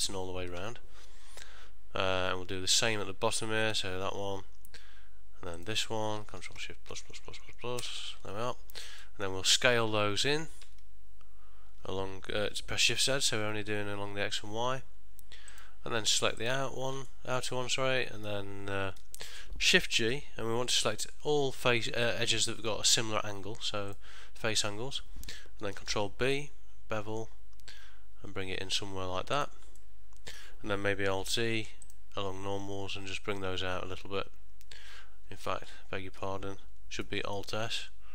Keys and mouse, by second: 3.8 shift+click, 5.7 shift+click, 6.7 ctrl+shift+KP_Add, 7.0 ctrl+shift+KP_Add, 7.9 ctrl+shift+KP_Add, 9.2 middle click, 10.7 s, 16.5 click, 17.1 middle click, 19.1 ctrl+middle click, 21.0 shift+g, 29.9 middle click, 31.3 alt+e, 35.9 ctrl+z, 37.2 alt+s.